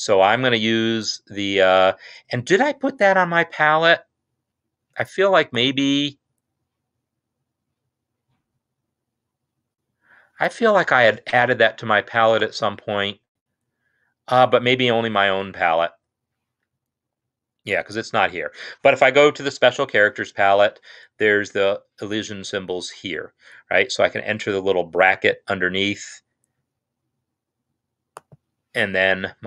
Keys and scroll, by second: 19.8 F2.